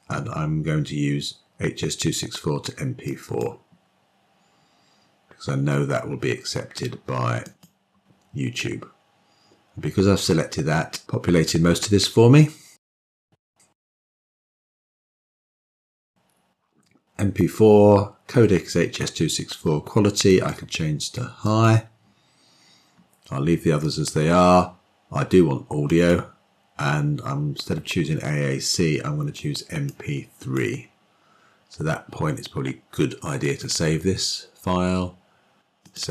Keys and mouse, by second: 7.4 click, 20.2-21.5 drag, 25.7-30.5 drag, 33.4-36.1 drag.